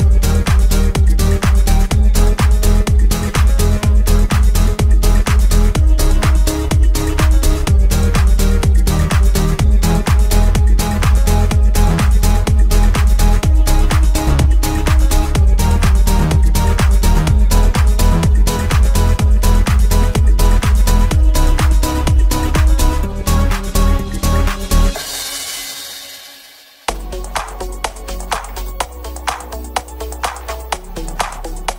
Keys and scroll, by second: 25.1 9.